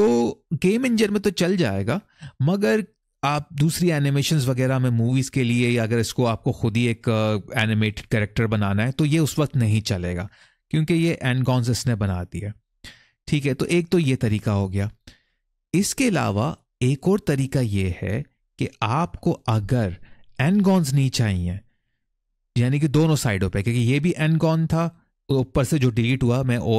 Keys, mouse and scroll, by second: 1.7-2.2 scroll down 1, 2.4 middle click, 10.4-13.4 scroll up 1, 14.9 ctrl+z, 22.4 middle click, 24.1 middle click, 26.5 ctrl+z.